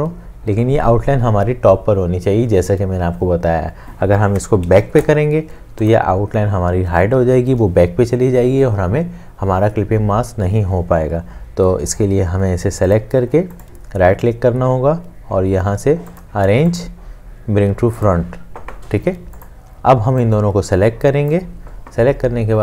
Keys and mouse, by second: 13.6 right click.